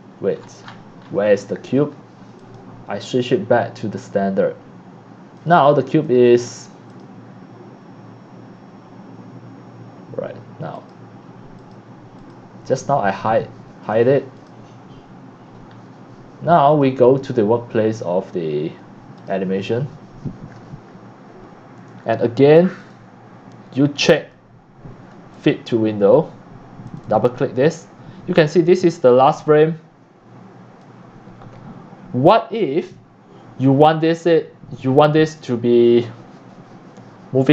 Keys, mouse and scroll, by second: 0.4-1.1 scroll down 14, 1.1-1.6 scroll up 13, 1.8 scroll down 6, 2.4 click, 3.1 click, 3.9 click, 4.4 click, 5.4 click, 5.5 click, 6.0 click, 6.9 click, 10.8 click, 11.0 right click, 11.6 click, 12.2 click, 13.1 click, 13.8 click, 14.4 click, 15.7 scroll up 3, 16.7 click, 17.3 click, 19.2 click, 20.7 click, 22.8 click, 24.2 click, 25.3 click, 26.5 scroll up 1, 26.9 click, 27.0 click, 34.1-35.7 drag, 36.1-37.5 drag.